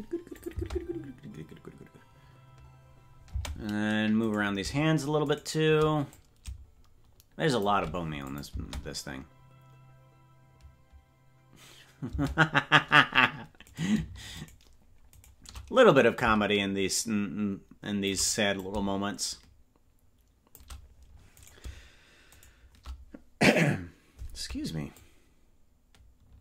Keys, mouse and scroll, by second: 0.4 click, 0.8 space, 3.3 space, 4.3 right click, 5.3 shift+right click, 6.0-7.6 drag, 8.3 click, 8.5 space, 12.2 space, 13.7-16.1 right drag, 16.1-18.1 drag, 18.5-20.6 drag, 21.4 right click, 24.9-26.4 shift+drag.